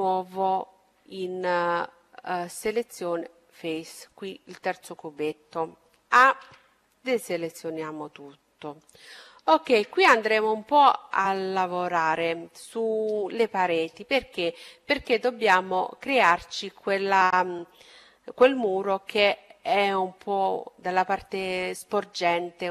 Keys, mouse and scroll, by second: 0.8-2.5 drag, 3.6-5.6 drag, 6.1 a, 7.9-10.7 middle drag.